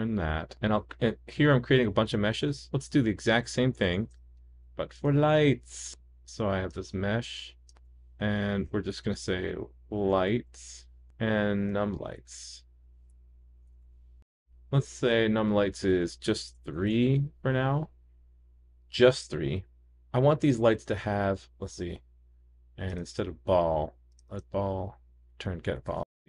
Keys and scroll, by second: 4.0 shift+super+d, 7.7 super+d, 12.8 super+d.